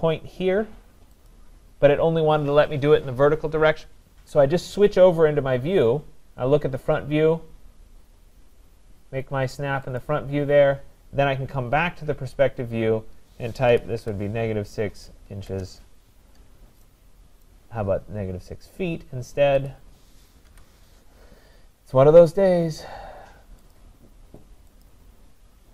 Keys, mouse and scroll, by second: 0.0-0.7 scroll, 1.3 click, 6.1 click, 10.0 click, 11.6-12.7 scroll, 13.5-15.8 typing, 17.4 right click, 17.8 scroll, 18.2 scroll down 3, 18.2 -, 18.2 scroll up 4, 19.7 click, 20.5 Delete, 23.0 scroll, 23.7 click, 24.9 click.